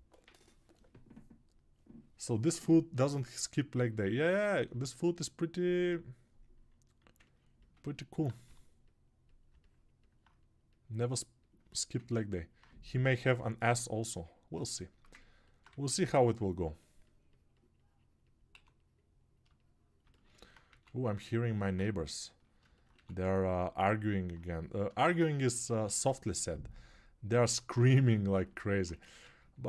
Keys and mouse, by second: 23.2 ctrl+1, 29.2 ctrl+1.